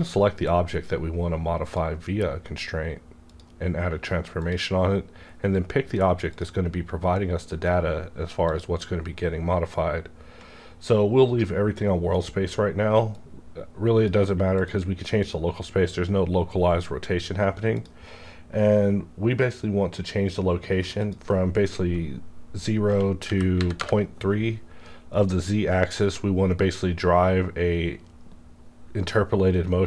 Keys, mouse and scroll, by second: 13.2-15.2 drag, 17.8 click, 21.0 click, 22.8 Tab, 23.2 KP_Decimal, 23.5 KP_3, 23.7 KP_Enter.